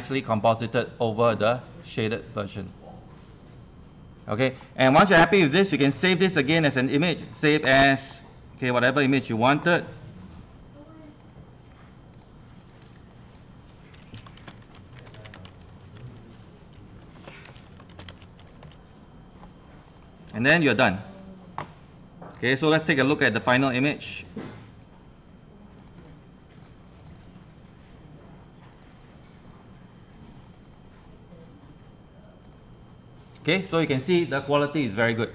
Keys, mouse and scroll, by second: 1.3 click, 11.4 click, 14.2-16.0 typing, 17.2-19.1 typing, 19.9-30.0 drag, 30.7 click.